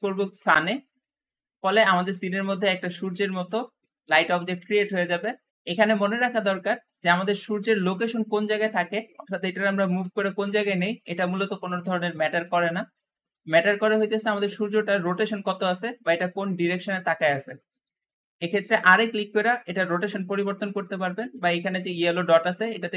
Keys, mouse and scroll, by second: 1.5 scroll down 2, 1.9 shift+middle click, 2.5 g, 2.6 g, 6.7 scroll up 1, 7.5 g, 7.6 g, 8.7 scroll down 2, 9.1 middle click, 9.8 g, 10.7 middle click, 11.0 g, 11.3 g, 11.5 g, 12.2-14.9 middle drag, 14.9 r, 14.9 r, 15.2 r, 18.6 r, 18.7 r, 19.3 r, 22.0 click.